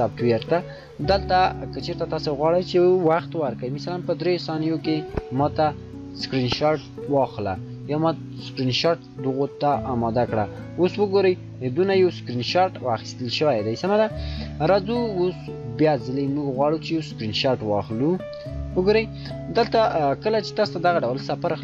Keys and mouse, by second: 1.0 shift+click, 1.1 shift+click, 4.0 shift+click, 4.1 shift+click, 11.5-13.6 shift+drag.